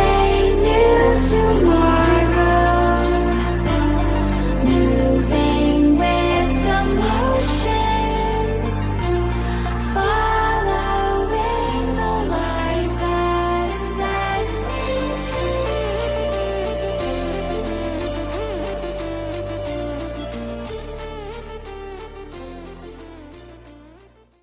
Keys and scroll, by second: 10.0 ctrl+0.